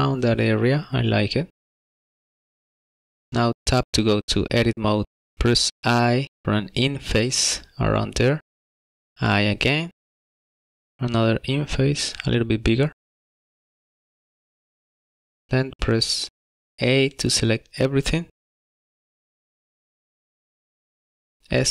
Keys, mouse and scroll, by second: 1.5 scroll down 5, 1.6 shift+middle click, 2.2 click, 2.3 shift+middle click, 2.3 scroll up 6, 2.4 middle click, 2.7 scroll down 3, 2.9 middle click, 3.5 Tab, 5.6 i, 9.8 i, 18.9 a.